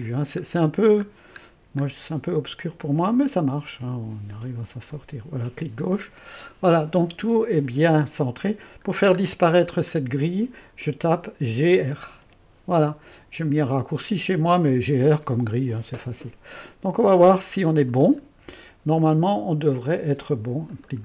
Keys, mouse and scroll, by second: 0.0-0.8 scroll up 2, 1.1-1.7 scroll up 2, 1.7-3.1 scroll up 1, 4.9 click, 5.9-7.8 scroll down 1, 7.8 scroll down 1, 8.0 middle click, 11.8-12.7 typing, 16.6 click, 16.8-18.0 middle drag, 18.0 click, 20.7 middle click.